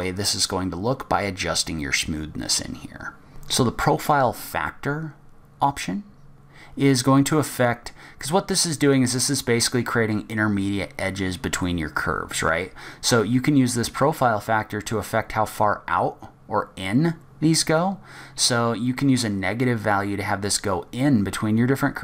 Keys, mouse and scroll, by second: 3.3 middle click, 3.3-3.8 scroll down 3, 3.8-4.3 scroll down 2, 7.3 click.